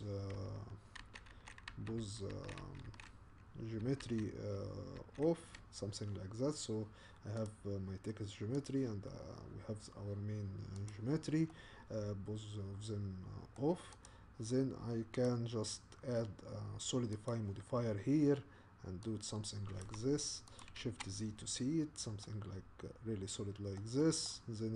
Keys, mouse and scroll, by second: 1.0 ctrl+z, 1.3 ctrl+z, 1.7 ctrl+z, 2.0 ctrl+z, 2.3 ctrl+z, 2.6 ctrl+z, 2.9 ctrl+z, 4.0 ctrl+z, 5.0 ctrl+z, 7.4 click, 8.7 click, 10.9 click, 11.5-14.0 middle drag, 14.0 click, 17.3-20.6 drag, 20.8 shift+z, 21.6-22.2 scroll up 3, 22.2-24.7 middle drag.